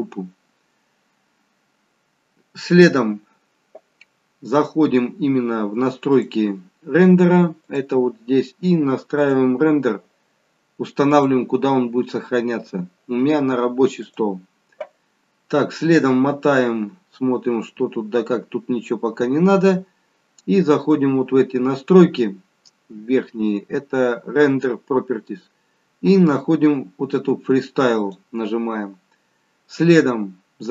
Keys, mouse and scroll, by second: 6.0 click, 7.6 click, 9.1 click, 15.7-17.5 scroll down 8, 17.5-18.6 scroll up 5, 20.7 click, 25.4-27.9 scroll down 3, 27.9 click, 27.9-28.2 scroll down 2.